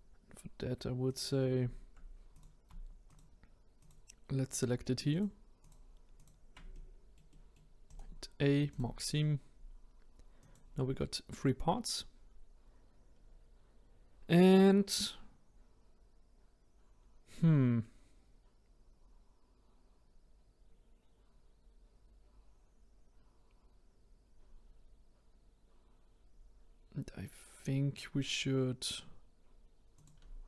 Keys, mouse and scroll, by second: 1.1 click, 2.3 click, 3.1 shift+click, 3.7 shift+click, 4.5 shift+click, 5.1 shift+click, 5.6 shift+click, 6.1 shift+click, 6.7-7.9 middle drag, 7.9-9.2 right drag, 9.2-10.4 scroll down 1, 10.4 click, 13.1-13.9 scroll up 2, 29.9 click.